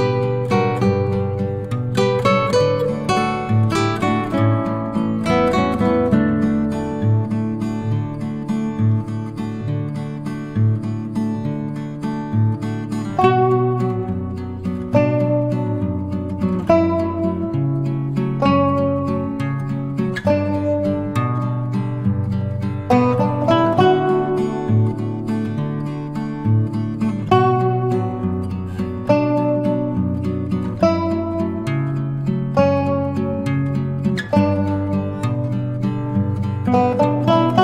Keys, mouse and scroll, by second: 0.6 ctrl+scroll down 1, 1.3-2.2 drag, 4.0 shift+h, 5.7 shift+h, 6.8 ctrl+scroll up 1, 7.2 click, 9.6 shift+click, 15.1-16.8 typing, 17.8 click, 19.5-20.9 typing, 21.9 click, 23.4-25.0 typing, 25.2 Return, 26.9 shift+click, 28.5 click, 29.7 shift+click, 30.9 click, 32.6 shift+click, 33.4 click, 34.6 shift+click, 35.3 click.